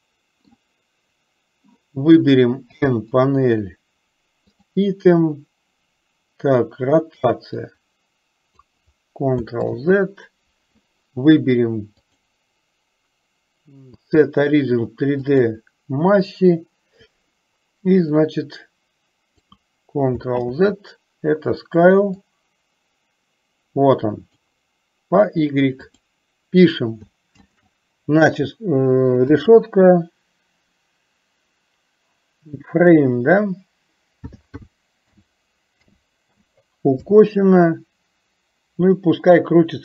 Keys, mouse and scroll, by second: 2.9 n, 7.6-8.9 drag, 9.7 ctrl+z, 12.1-15.7 drag, 18.3-19.8 drag, 20.5 ctrl+z, 22.2-24.8 drag, 26.0-39.8 drag.